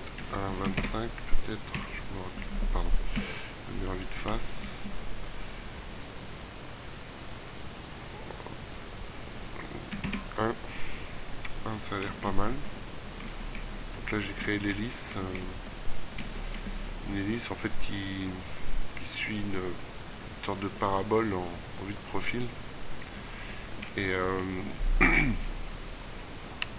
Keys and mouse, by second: 1.5 KP_3, 2.9 KP_1, 11.5-12.9 middle drag, 16.4 middle click.